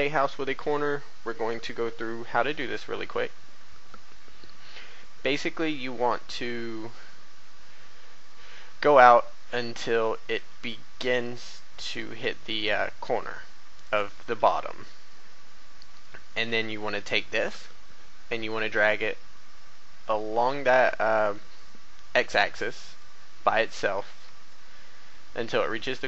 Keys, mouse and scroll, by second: 8.4 click, 9.7 b, 9.9-11.0 drag, 12.7-14.1 drag, 14.3 a, 15.1 scroll up 1, 16.3 b, 16.5-23.2 drag, 23.6 a, 24.4 shift+middle click, 25.6 shift+a.